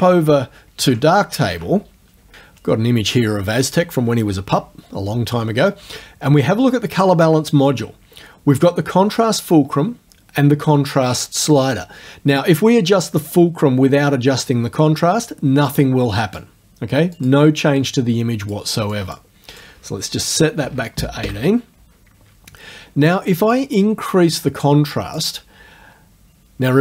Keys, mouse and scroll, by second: 15.8-16.6 drag, 17.2 click, 17.8-18.7 drag, 18.9 click, 19.6 right click, 20.6 KP_1, 21.2 KP_Enter, 23.6 click, 25.3-26.8 scroll up 1.